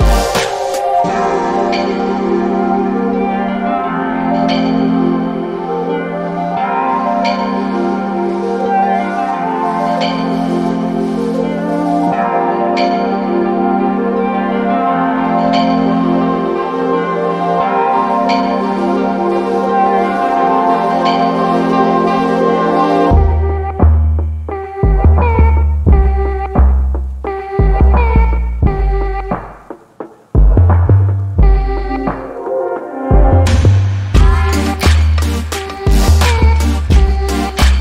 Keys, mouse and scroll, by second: 16.1 alt+middle click, 16.4-17.1 alt+scroll up 2, 17.1 alt+middle click, 18.9 click, 25.3 alt+middle click, 26.6 click, 30.4 alt+middle click, 31.7 click, 34.2 alt+middle click, 34.6-35.0 alt+scroll down 2, 35.2 alt+middle click, 37.0 click, 37.3 right click.